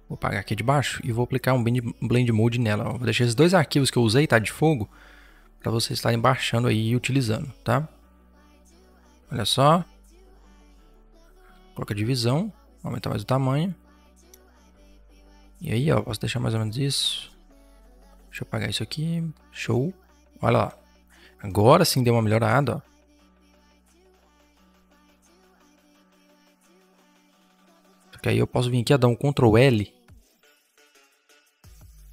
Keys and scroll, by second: 11.3 ctrl+t, 14.1 Return, 18.4 Delete, 21.5 v, 22.4 ctrl+z, 26.3 ctrl+z, 29.3 ctrl+l.